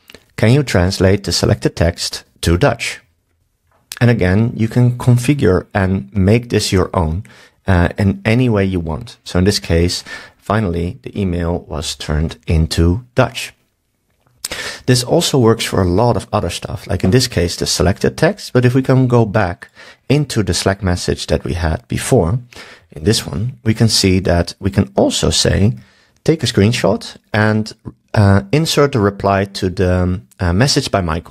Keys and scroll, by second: 25.8 super+s.